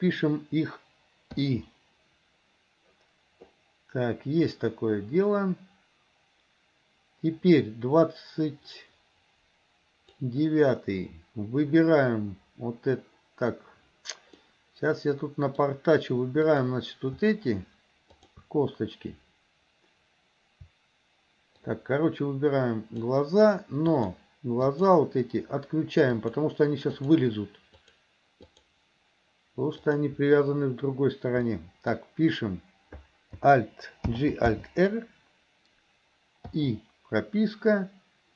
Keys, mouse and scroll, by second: 4.6-10.3 drag, 14.5-15.6 middle drag, 16.5 click, 18.2 shift+click, 21.7-23.2 shift+drag, 23.9 shift+click, 24.6 shift+click, 26.2 shift+click, 27.0 shift+click, 27.7 shift+click, 28.5 shift+click, 29.9 shift+click, 31.5 middle click, 34.2 alt+g, 34.6 alt+r, 36.6 i.